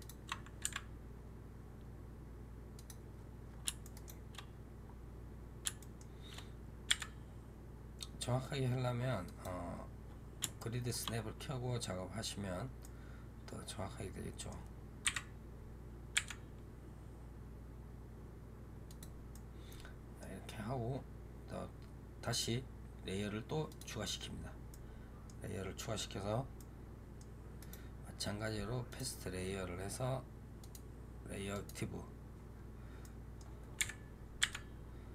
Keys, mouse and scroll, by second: 0.5 g, 3.0 scroll up 3, 3.7-4.4 shift+middle drag, 4.4 scroll up 2, 5.7-6.2 shift+middle drag, 6.2-6.8 scroll up 4, 6.8 g, 9.6 scroll down 1, 10.5-11.0 shift+middle drag, 11.0-12.7 scroll down 1, 12.7-14.9 middle drag, 14.9 KP_1, 16.0 g, 19.2-23.5 middle drag, 23.5 click, 24.6-26.2 middle drag, 26.2 scroll down 3, 26.4-27.5 middle drag, 27.5-30.5 right drag, 30.5-32.9 drag, 32.9 middle click, 33.7 KP_7, 34.3 g.